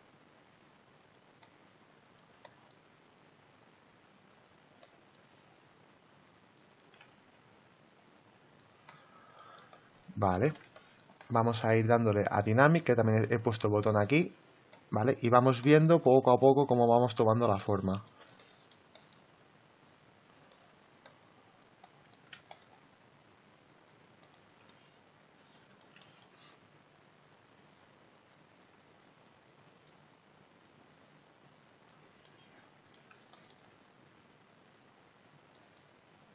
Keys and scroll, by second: 7.2 ctrl+z.